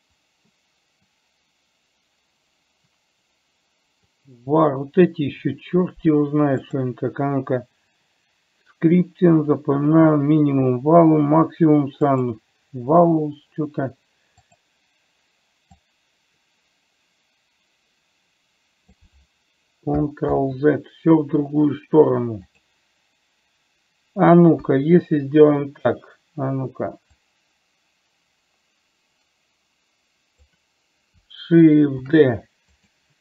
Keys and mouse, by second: 16.2-19.3 drag, 20.7 ctrl+z, 22.8 click, 25.0 KP_1, 27.6 click, 29.1-30.8 drag, 32.5 shift+d.